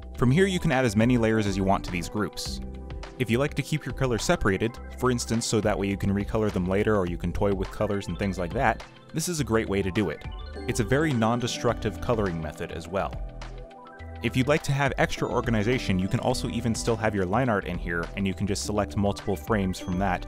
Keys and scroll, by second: 6.5 ,, 6.7 ., 7.8 ., 9.0 ., 10.2 alt+Delete, 10.6 alt+Delete, 10.9 alt+Delete, 11.0 ., 11.1 alt+Delete, 11.2 ., 11.5 alt+Delete, 11.6 ., 11.7 alt+Delete, 12.0 alt+Delete, 13.9 Delete, 14.7 ., 15.0 ., 15.5 Delete, 16.5 Delete, 17.0 ., 17.4 Delete, 18.0 ., 18.5 Delete, 18.7 Delete, 19.1 ., 20.0 /, 20.1 ..